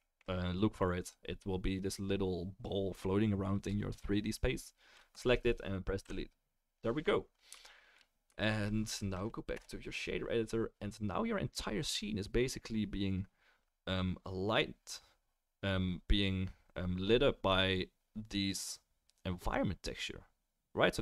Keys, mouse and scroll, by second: 1.0 click, 1.0 right click, 5.1 click, 6.0 Delete, 6.1 middle click, 9.0-21.0 middle drag, 9.5 KP_0.